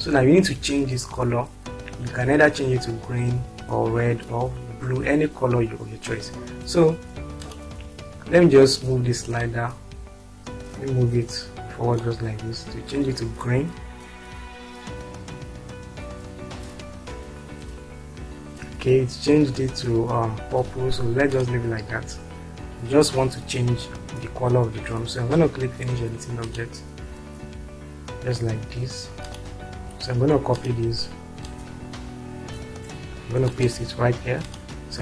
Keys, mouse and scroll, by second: 21.8 click, 22.3 click, 26.4 click, 28.1 click, 29.4 click, 30.5 click, 31.4-33.2 ctrl+drag.